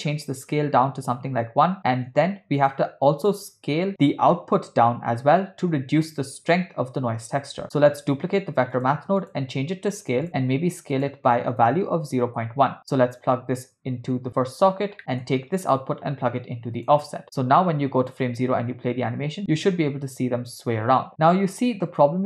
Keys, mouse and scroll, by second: 2.6 click, 8.0 shift+d, 9.2-10.3 drag, 10.9-12.3 drag, 13.4-14.7 drag, 15.0 middle click, 15.7-17.0 drag, 18.1 click, 18.4 space.